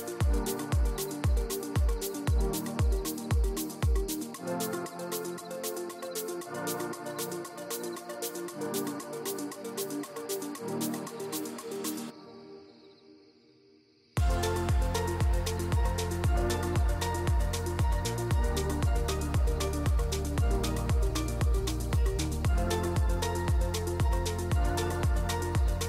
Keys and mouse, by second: 1.1 Tab, 1.4 s, 2.7 2, 3.3 click, 3.8 middle click, 4.0 e, 5.1 click, 6.0 click, 6.0 middle click, 6.3 ctrl+b, 8.2 Tab, 8.5 right click, 9.0 middle drag, 9.8 middle drag, 10.1 shift+middle drag, 10.5 middle drag, 10.8 shift+middle click, 11.2 middle click, 11.7 middle click, 12.0 shift+middle click, 12.8 shift+a, 15.7 ctrl+alt+KP_0, 16.3 ctrl+b, 19.5-20.2 drag, 21.7 q, 22.7 click, 23.2-24.1 shift+drag, 24.7 q.